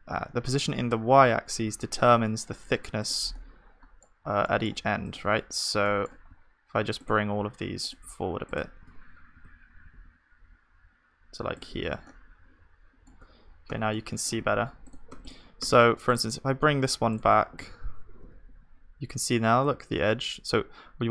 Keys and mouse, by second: 4.3 Tab, 7.6-11.5 drag, 9.3 g, 13.2 Tab, 13.2-16.5 middle drag, 16.5-19.1 drag, 17.6 g, 19.0 g.